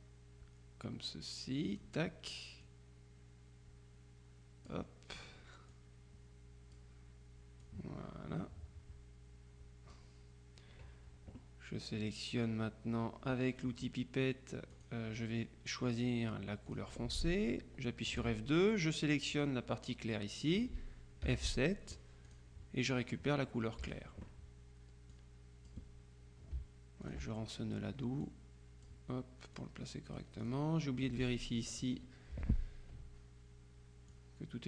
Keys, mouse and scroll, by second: 2.7-5.2 drag, 5.9-7.4 drag, 7.8-10.5 drag, 14.8 click, 16.8 click, 18.2 F2, 18.8 t, 19.4 click, 21.4 F7, 22.4 click, 23.9 F2, 25.2-26.2 drag, 27.1 ctrl+click, 28.3-29.4 drag, 29.6-31.0 drag, 31.6 click, 32.4 Delete, 34.2-34.6 drag.